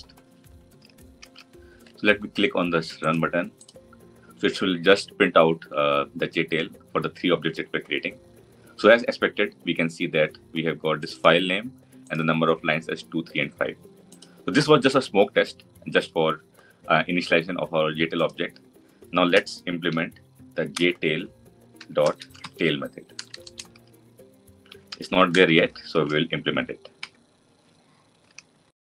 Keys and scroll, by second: 20.6 Return.